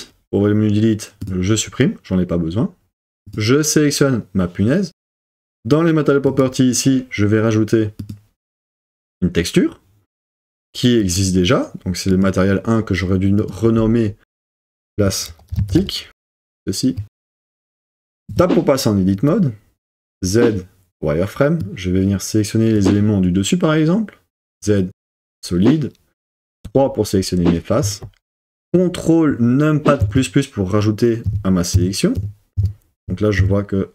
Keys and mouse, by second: 11.2-12.6 drag, 13.4-16.2 drag, 18.3 Tab, 19.6 middle click, 20.2 z, 24.4 z, 26.6 3, 30.0 super+KP_Add, 31.2 super+KP_Add, 31.7 super+KP_Add, 32.2 super+KP_Add, 32.6 super+KP_Add, 33.0 super+KP_Add, 33.4 super+KP_Add.